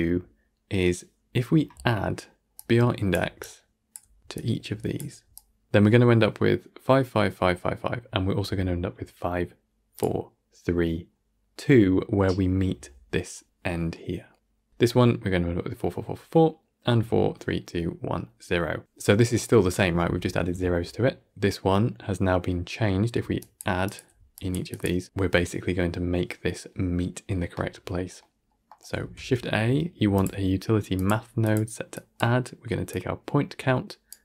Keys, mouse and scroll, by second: 2.5-30.9 drag, 30.9 shift+a, 32.8-34.0 drag.